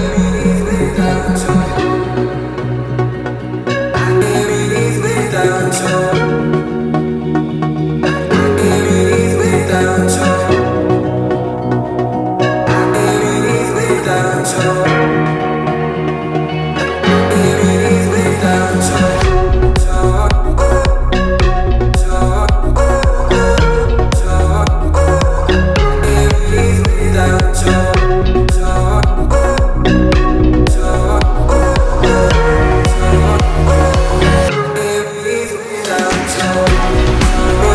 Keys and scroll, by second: 1.3 t, 2.6 1, 2.8 Return, 3.0 space, 3.6 l, 4.7 space, 5.5 p, 13.8 space, 14.7 t, 15.8 1, 15.9 Return, 16.1 space, 16.8 l, 18.0 space, 18.8 p, 24.9 t, 26.3 space, 27.1 l, 28.2 space, 28.7 p, 31.9 space, 33.1 t, 35.0 1, 35.1 Return, 35.4 space, 36.7 l.